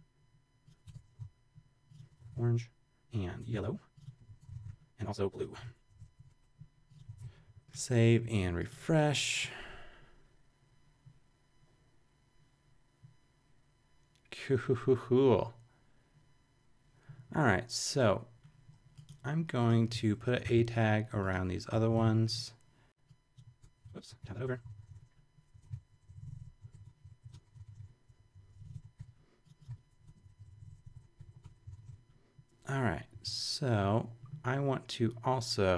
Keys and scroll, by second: 0.0-0.8 typing, 0.8 Return, 1.2 super+v, 1.9-5.1 typing, 3.2 Return, 3.5 super+v, 5.5 Return, 5.6 super+v, 5.8 super+Up, 6.1 Page_Up, 6.2-7.7 typing, 20.4 shift+super+c, 21.7 Return, 22.0 super+v, 23.7 super+z, 24.2 super+Right, 24.3-25.4 typing, 25.4 Down, 25.6 super+v, 26.0 shift+Down, 26.5 shift+super+Down, 26.6 shift+super+], 26.7 super+Return, 27.1 super+Right, 27.2-28.2 typing, 28.7 shift+super+Up, 28.9 shift+super+], 29.7 super+v, 30.0 Return, 30.1 Down, 30.8 shift+super+Down, 31.2 super+Right, 31.3 Return, 31.5-32.3 typing.